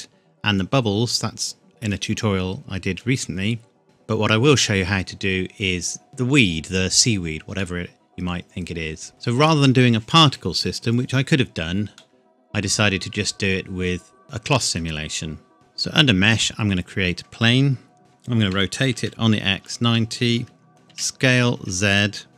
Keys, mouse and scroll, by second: 7.5-7.9 scroll up 1, 7.9 middle click, 8.3 scroll down 1, 11.9 middle click, 12.8 scroll down 1, 13.9-14.3 scroll up 1, 15.5 shift+a, 16.2 click, 18.0-21.5 typing, 19.8 KP_Enter, 20.7 Tab.